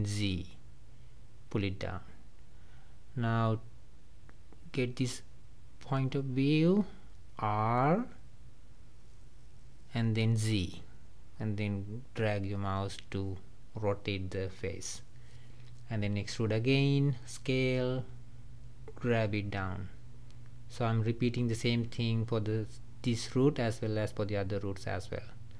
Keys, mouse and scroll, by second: 2.8-9.2 middle drag, 9.5 r, 13.3 e, 15.3-16.9 middle drag, 16.9 s, 18.8 g, 21.1-23.7 middle drag, 23.7 r.